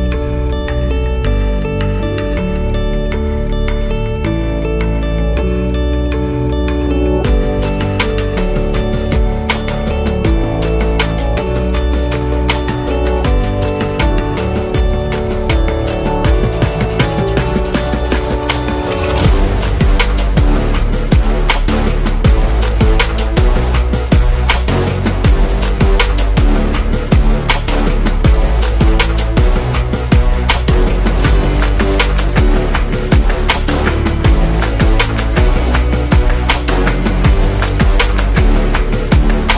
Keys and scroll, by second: 8.0 space, 13.9-15.8 typing, 17.1-17.4 typing, 26.5-27.7 typing, 28.6 Return, 33.2 a, 37.0 v.